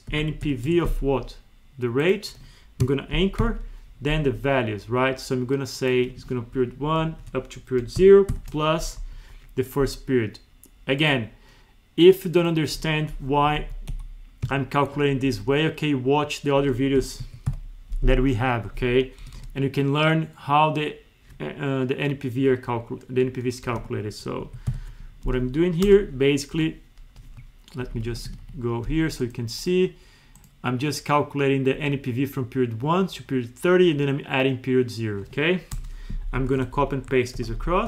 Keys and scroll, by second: 0.7 Tab, 2.8 F4, 6.8 ctrl+shift+Right, 9.1 Left, 13.5 Down, 13.6 Left, 13.9 Down, 14.5 F2, 26.5 Up, 27.9 End, 28.3 Home, 36.3 Up, 36.5 ctrl+c, 36.7 Down, 37.4 ctrl+v, 37.5 Down.